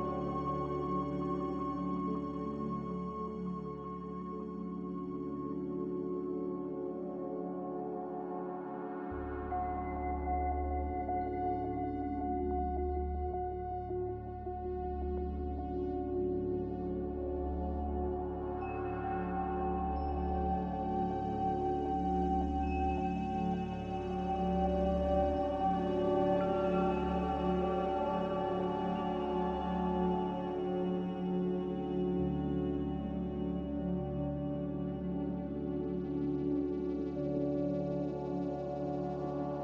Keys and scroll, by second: 3.3 typing, 3.6 Return, 6.7 typing, 7.3 Return, 9.5 typing, 9.8 Return, 14.2 5, 14.4 Return, 19.7 5, 19.8 Return, 26.9 1, 27.0 0, 27.2 Return, 35.5 typing, 35.8 Return, 37.0 b.